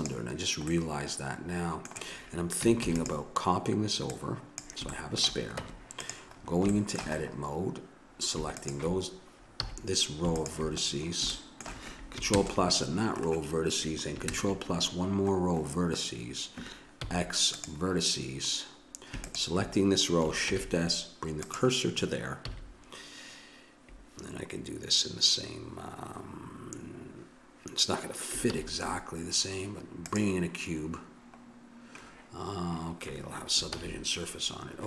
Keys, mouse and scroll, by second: 0.8-2.8 middle drag, 2.8 shift+d, 4.1 click, 4.9-6.0 middle drag, 5.6 Tab, 8.6 click, 9.5 a, 11.3 middle click, 12.3 ctrl+KP_Add, 17.0 x, 19.2-20.5 drag, 20.5 shift+s, 22.4 a, 28.5 shift+a, 33.7 ctrl+z.